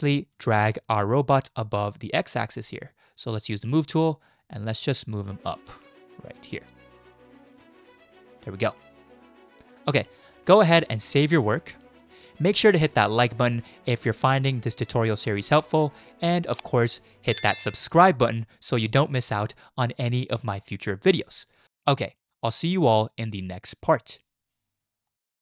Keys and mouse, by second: 0.5 shift+click, 3.6 click, 5.0-7.5 drag, 8.0 shift+middle drag, 8.4-9.9 middle drag, 10.5 middle click.